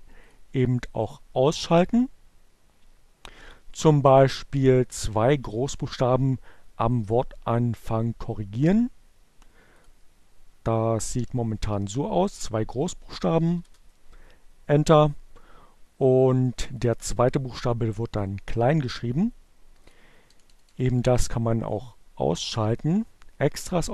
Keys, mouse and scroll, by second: 1.1 click, 8.5 click, 10.6 shift+i, 11.0 b, 13.0 e, 13.0 Return, 15.8 click, 19.2 click, 19.4 BackSpace, 21.6 click, 23.4 click.